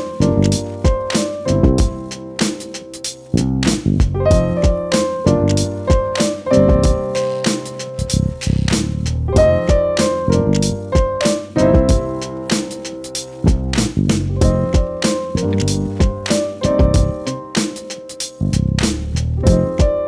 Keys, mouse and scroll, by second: 8.4 ctrl+c, 14.6 ctrl+r.